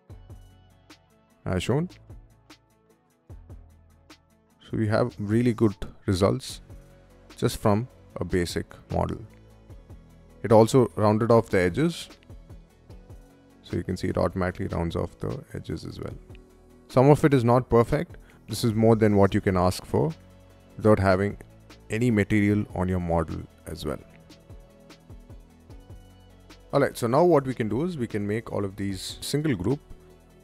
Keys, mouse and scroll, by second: 0.4-2.4 drag, 4.4-6.3 middle drag, 6.8 click, 7.6 click, 8.6 click, 9.4 click, 10.7 click, 12.2-12.8 middle drag, 12.9 click, 13.7 click, 14.5 click, 15.3 drag, 17.8 middle click, 17.8 scroll down 1, 19.3 click, 20.0 click, 23.8 middle click, 24.3 click, 27.5 click, 30.1 click.